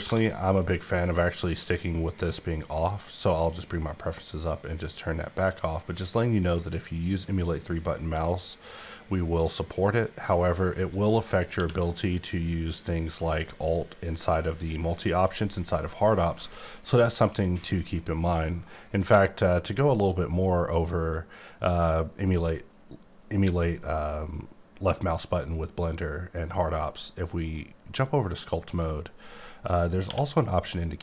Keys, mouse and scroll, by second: 0.0 F4, 0.6 click, 2.0 click, 2.8 click, 5.7 click, 10.8 click, 11.5 q, 28.3 click, 30.0 q.